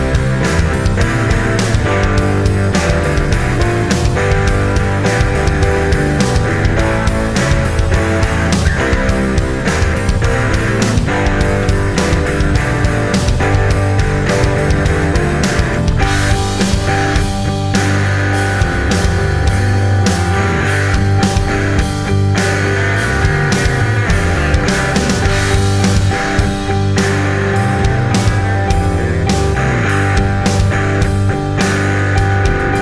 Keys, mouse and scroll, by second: 14.4 click.